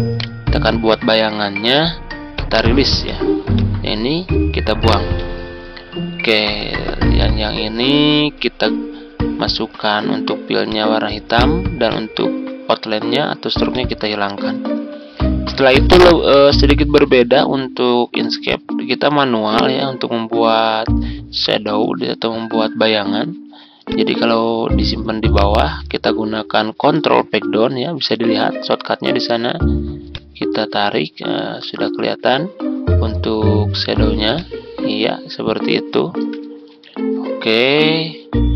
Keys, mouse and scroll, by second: 0.1 right click, 2.2 click, 5.1 Delete, 7.1-25.4 drag, 27.5 ctrl+Page_Down, 30.4-31.9 shift+drag, 32.2-32.6 ctrl+scroll up 1, 33.3-34.2 ctrl+scroll down 1, 34.4-36.2 shift+drag, 36.7 shift+Up, 36.9 shift+Up, 37.0 shift+Up, 37.2 shift+Up, 37.4 shift+Up.